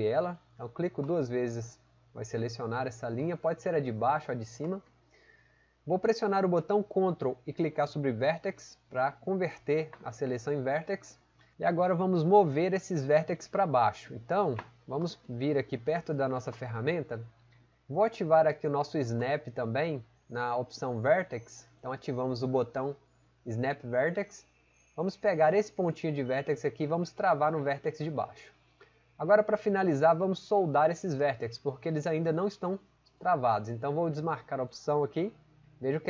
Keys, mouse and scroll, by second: 3.2 right click.